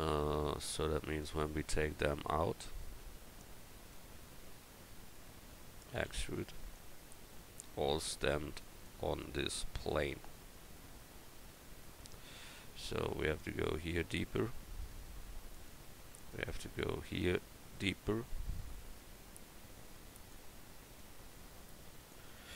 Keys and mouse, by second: 1.1-3.9 right drag, 3.9-6.0 middle drag, 6.0 e, 6.7-8.8 drag, 9.3 middle click, 9.4 e, 11.3 Tab, 11.8-15.4 right drag, 12.2 Tab, 15.9 Tab, 16.3 click, 16.5 Tab, 21.0-22.5 drag, 22.3 Tab.